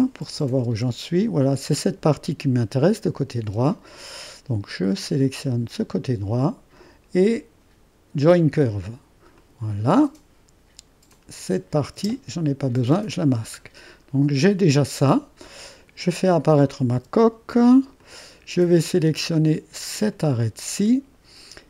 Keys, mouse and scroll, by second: 0.0 click, 0.6 space, 3.5 space, 5.4-6.6 drag, 8.2-12.1 drag, 12.0 space, 13.8-16.5 scroll down 1, 16.5-19.3 drag, 16.9 space, 20.1-21.6 drag.